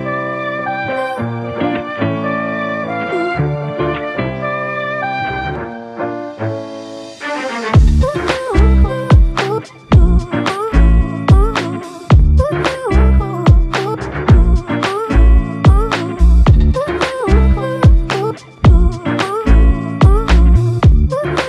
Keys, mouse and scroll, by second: 3.8 ctrl+z, 4.4 ctrl+z, 5.0 ctrl+z, 5.3 ctrl+z, 5.4 ctrl+z, 5.6 ctrl+z, 5.9 ctrl+z, 6.1 ctrl+z, 6.2 ctrl+z, 6.4 ctrl+z, 7.0 ctrl+z, 11.4 a, 15.1 typing, 16.5 right click, 17.5 s, 19.8 Tab, 20.8 right click, 21.2 s.